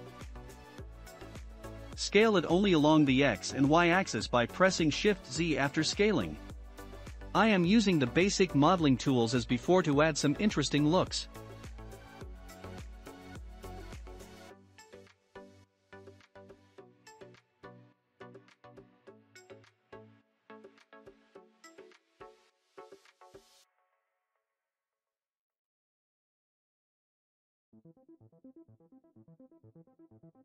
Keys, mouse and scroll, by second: 0.5 s, 5.8 click, 6.1 scroll down 4, 6.6-8.0 shift+middle drag, 8.0-8.4 scroll up 4, 8.8 shift+middle click, 9.8 3, 10.3-11.7 shift+middle drag, 11.7 click, 12.3 scroll down 3, 12.7-13.7 shift+middle drag, 13.7-16.8 drag, 18.3 click, 18.7-19.0 scroll down 2, 19.3 shift+middle click, 19.3 scroll down 1, 20.0-20.9 scroll up 2, 20.9 click, 21.3 click, 22.7 click, 23.0 scroll up 1, 23.0-23.8 scroll down 5, 23.9-25.0 middle drag, 25.0 click, 25.6 click, 29.8 click, 30.2 scroll down 2.